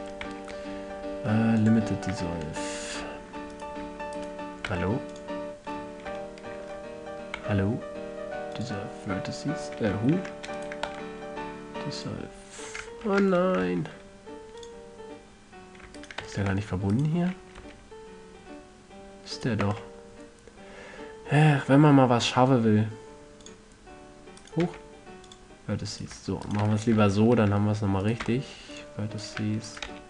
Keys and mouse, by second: 0.2 click, 0.8 x, 2.6 a, 5.2 x, 6.2-6.8 middle drag, 7.9 x, 9.2-11.1 middle drag, 10.7 ctrl+z, 11.1-12.6 drag, 11.4 x, 13.6 ctrl+z, 14.2 x, 16.5-17.1 drag, 16.7 f, 17.1 a, 18.1 g, 20.2 x, 24.9-28.5 drag, 25.2 x, 27.2 f, 28.8 x.